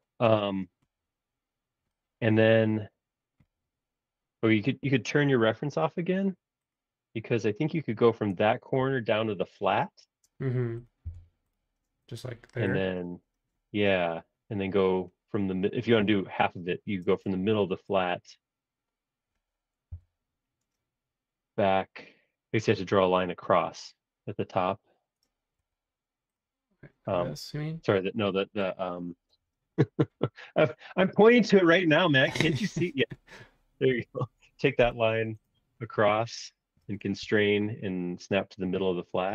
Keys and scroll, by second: 8.8 i, 11.0 l, 17.0 space, 19.9 l, 25.7 Escape, 28.9 Escape.